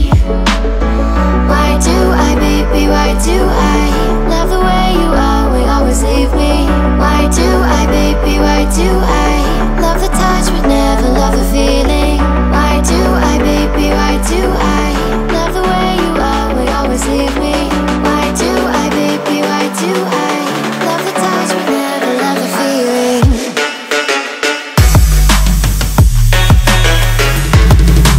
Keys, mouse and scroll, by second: 6.2 ctrl+a, 8.8-14.1 drag, 16.2 drag, 17.0 click, 19.2 click, 26.6 w.